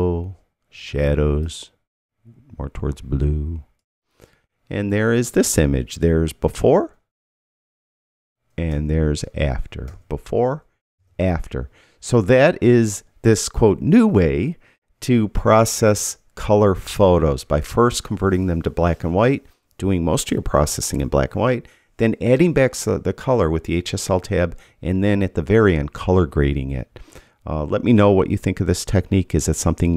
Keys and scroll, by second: 6.5 \, 8.7 \, 9.8 \.